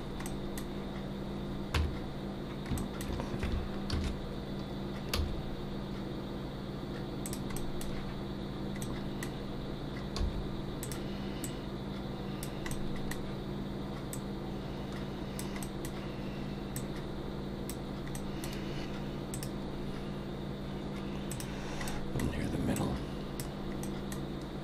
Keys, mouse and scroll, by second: 0.2 middle click, 1.8 Tab, 2.8 shift+middle click, 3.9 ctrl+1, 5.1 s, 7.6 middle click, 8.8 middle click, 10.2 s, 11.4 click, 12.7 middle click, 14.1 click, 15.6 middle click, 16.8 click, 18.1 middle click, 21.9 middle click, 22.7 click, 23.8 middle click.